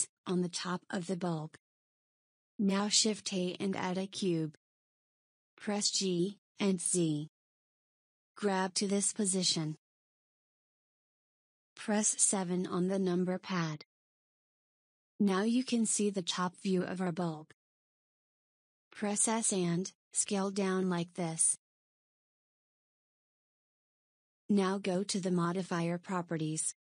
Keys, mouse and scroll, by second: 1.3 KP_1, 2.8 shift+a, 6.3 g, 12.2 KP_7, 18.9 s, 25.7 click.